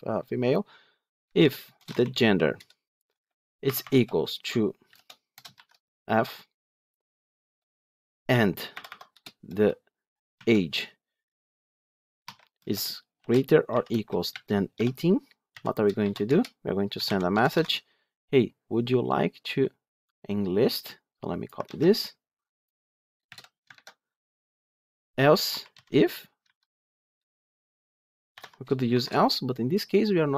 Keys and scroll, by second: 2.5 Return, 17.5 Tab, 21.5 ctrl+c, 23.6 ctrl+v, 26.9 Return.